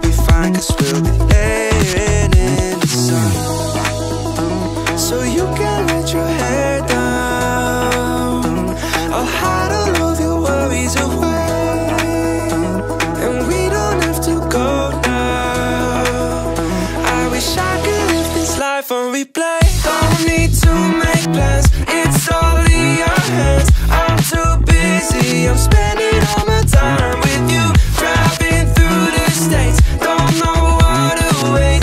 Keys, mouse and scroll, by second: 1.2 click, 2.8-3.8 middle drag, 4.0 click, 4.6 ctrl+a, 7.9-9.2 drag, 9.8-10.7 middle drag, 12.1 click, 12.4-13.0 scroll down 2, 13.0-13.8 scroll up 3, 13.9-14.4 shift+middle drag, 16.2-16.5 shift+middle drag, 17.3 shift+d, 19.2 click, 20.6 click, 22.2 click, 24.5 click, 26.4-27.3 scroll down 3, 28.2-31.3 drag, 31.7 shift+middle drag.